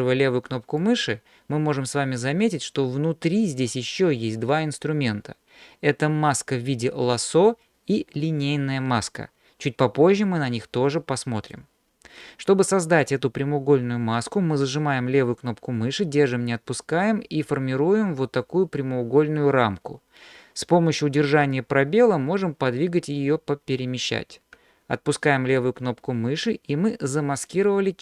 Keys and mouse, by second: 0.9-11.6 drag, 16.3-25.6 drag, 27.7-28.0 middle drag.